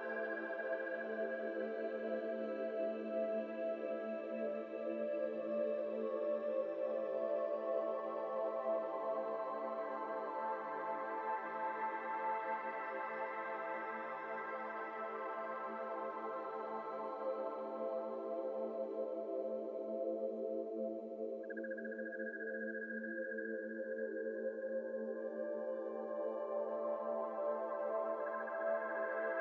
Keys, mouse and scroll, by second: 1.4 scroll down 2, 1.5-2.8 middle drag, 2.8 ctrl+z, 3.1 shift+s, 3.8 shift+a, 4.9 s, 6.7 scroll down 3, 7.0-7.4 middle drag, 7.4-8.0 s, 8.4 KP_0, 9.1-10.4 scroll down 11, 9.4 middle click, 9.9 middle drag, 10.1 Tab, 10.7 2, 10.8 click, 11.6 e, 13.0-14.2 shift+middle drag, 14.2 shift+click, 14.8 shift+click, 15.1 shift+click, 15.9 shift+click, 16.2 g, 18.8 x, 18.9 x, 19.1-21.9 middle drag, 21.9 click, 22.8 e, 24.9 1, 25.2 alt+z, 25.4 click, 26.1 n, 26.5 n, 26.6 m, 27.7 click, 28.0 m, 28.5 middle click, 29.0 Tab, 29.2-29.4 middle drag.